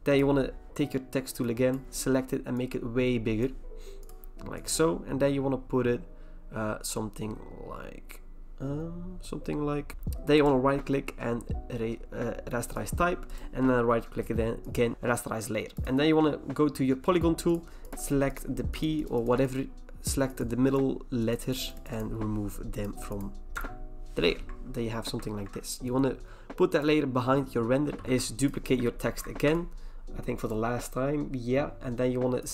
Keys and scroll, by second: 9.9 Return, 23.5 BackSpace, 25.3 ctrl+d, 27.8 v, 29.0 ctrl+j.